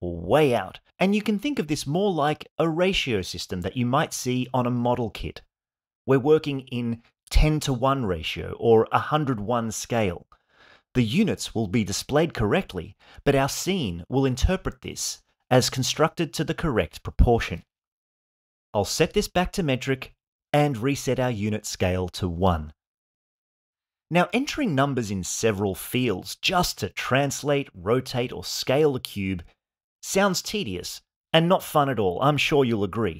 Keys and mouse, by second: 3.1-4.2 drag, 8.0-9.1 drag, 8.7 KP_0, 19.4-20.6 drag, 21.9-23.1 drag, 23.9 click, 24.4-26.0 drag, 26.2-27.4 drag, 28.0 click, 28.7 click, 29.4 click, 30.3 click, 31.0 click, 31.5 click, 32.2 click.